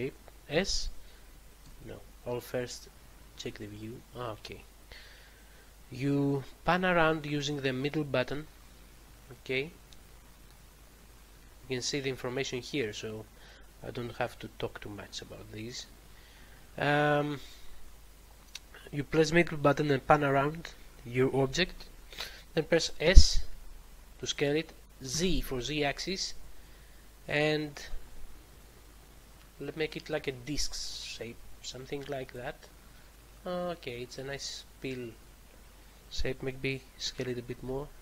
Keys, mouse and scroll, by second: 0.4 s, 1.5 Escape, 2.6 middle click, 6.6 middle click, 14.8 middle click, 19.5 middle click, 23.0 s, 25.0 z, 32.2 click, 32.6 middle click, 37.0 s, 37.5 z.